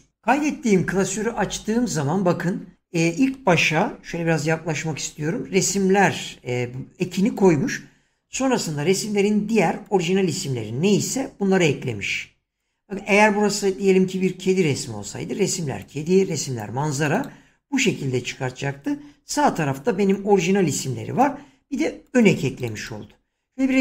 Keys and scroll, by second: 4.0 <, 19.3 <.